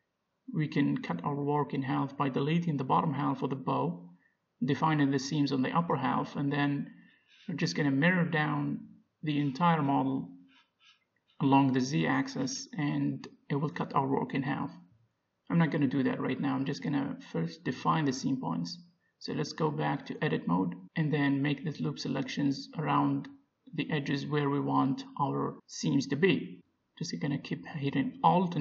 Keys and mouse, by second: 0.8 middle click, 1.2 a, 2.1 z, 4.5 b, 7.0-8.0 middle drag, 8.3 x, 10.1 Tab, 10.6 middle click, 11.4 click, 12.5 h, 13.7 z, 14.4 click, 15.2-16.6 middle drag, 16.8 middle click, 17.8 Tab, 20.0-23.0 middle drag, 22.4-25.8 drag, 23.2 ctrl+z, 25.8-27.5 middle drag, 27.5-28.6 drag.